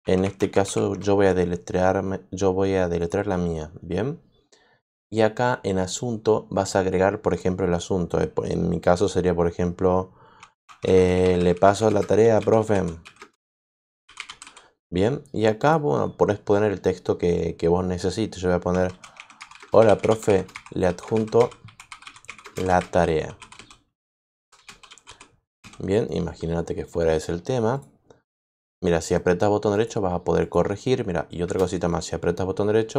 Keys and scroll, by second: 0.0-1.1 typing, 10.2-14.9 typing, 18.6-25.5 typing, 31.4 space.